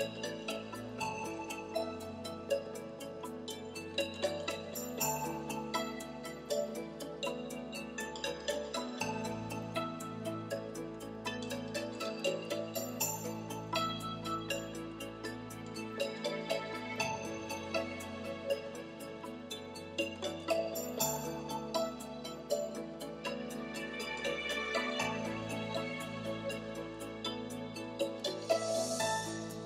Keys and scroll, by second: 1.2 Right, 1.7 \, 2.8 BackSpace, 4.3 Home, 17.5 BackSpace, 18.7 l, 19.1 8.